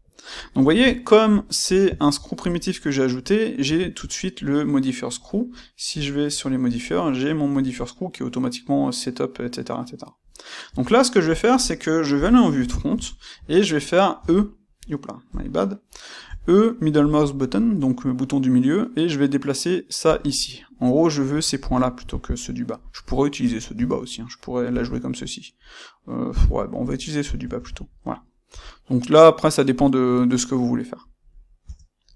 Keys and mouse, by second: 1.9 shift+q, 3.7 Escape, 5.9 click, 6.6 click, 9.3-11.2 middle drag, 10.6 Tab, 11.2 click, 12.2 KP_1, 12.7-20.1 ctrl+middle drag, 15.2 KP_1, 16.2 e, 20.1 click, 23.7 Tab, 24.6 g, 26.6 click, 27.4 Tab, 28.4 g, 31.1 click, 31.5 Tab.